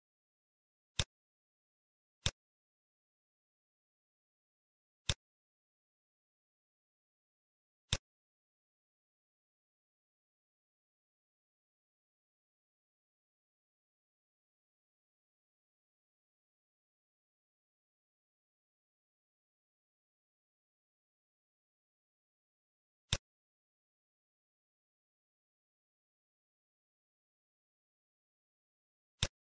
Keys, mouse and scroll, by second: 0.9 click, 2.5 scroll up 1, 4.0 scroll up 6, 4.1-4.4 scroll down 1, 5.0 click, 10.7-11.3 scroll down 11, 11.3 middle click, 11.9 scroll down 1, 12.1 middle click, 14.8-15.2 scroll up 7, 15.2 scroll down 2, 16.3 middle click, 16.3 scroll down 4, 17.7 scroll down 2, 18.1 middle click, 18.6 scroll down 1, 19.5 scroll down 4, 20.4-21.4 scroll up 9, 20.8 middle click, 21.4 middle click, 23.0 click, 27.1 scroll down 1, 27.7 middle click, 27.7 scroll down 6, 28.3 scroll down 2, 29.1 click.